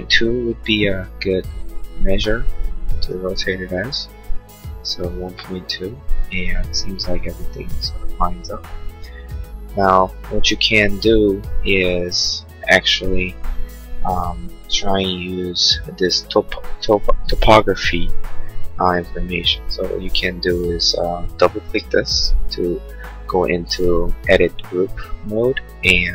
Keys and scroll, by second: 1.0 1, 1.5 Delete, 2.1 2, 3.2 Return, 6.0 space.